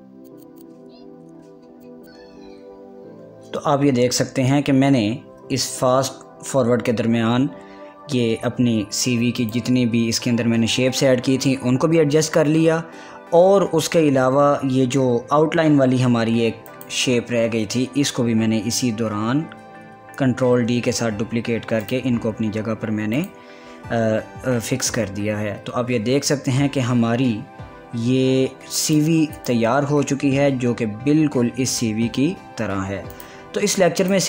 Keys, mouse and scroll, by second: 1.1 Up, 2.0-4.7 drag, 10.6 click, 18.0 click, 19.2 Left, 20.5 Up, 23.0 click, 25.4 Up, 30.0 click, 30.9 click, 31.3-31.7 scroll down 1, 32.6 scroll up 1, 33.2 scroll down 1, 33.4 scroll up 1.